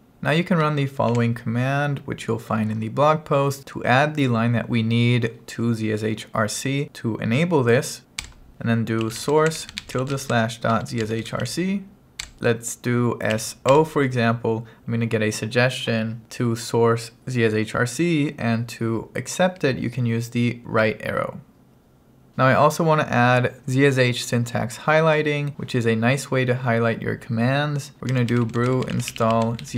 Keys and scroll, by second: 1.1 super+v, 8.3 Return, 9.1-12.3 typing, 13.4 s, 13.8 o, 20.8 Right, 27.9-29.7 typing.